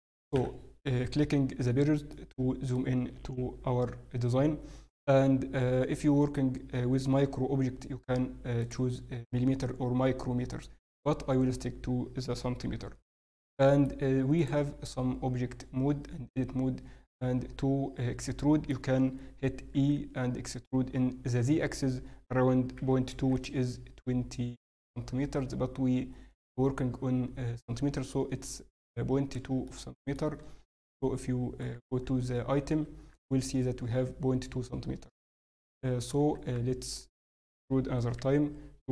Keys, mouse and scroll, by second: 2.1 middle click, 4.8-5.1 scroll up 1, 5.2-5.5 scroll down 1, 8.8 click, 12.6 n, 13.1 middle click, 14.3 click, 17.4 Tab, 18.2 middle click, 19.7 e, 28.2 scroll up 1, 29.6 shift+middle click, 30.9-31.4 scroll up 1, 30.9 n, 32.8 Tab, 36.3 Tab, 38.1 e.